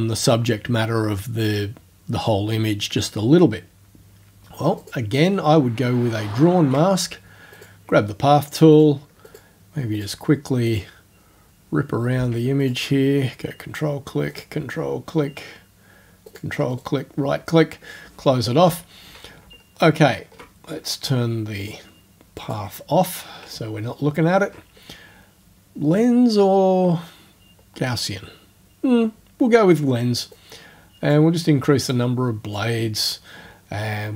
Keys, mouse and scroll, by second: 4.8 click, 5.8-6.5 ctrl+alt+scroll down 2, 7.6 click, 8.8 click, 9.3 click, 10.0 click, 10.7 click, 12.6 ctrl+click, 14.3 ctrl+click, 16.3 ctrl+click, 16.7 ctrl+right click, 19.6-20.2 ctrl+alt+scroll up 2, 21.6 click, 22.4 click, 23.8 ctrl+alt+scroll up 1, 30.4 click, 31.9 click.